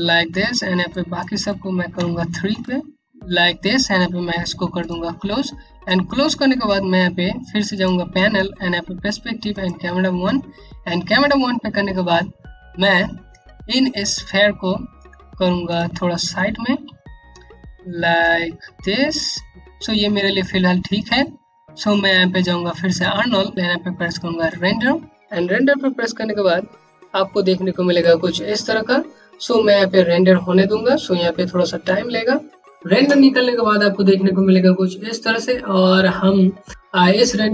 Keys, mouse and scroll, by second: 0.4 click, 1.5 KP_3, 2.6 click, 5.0 scroll down 1, 5.4 alt+click, 7.3 click, 14.9 shift+Num_Lock, 14.9 click, 15.2 shift+click, 16.4 w, 17.7 click, 17.7-18.5 typing, 22.4 click.